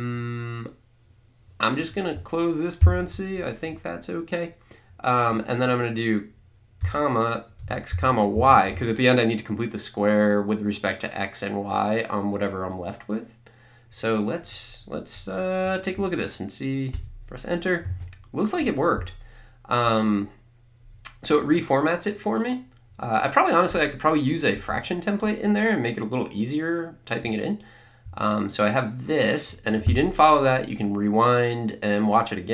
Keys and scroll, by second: 2.8 ), 6.8-8.8 typing, 16.9 Return.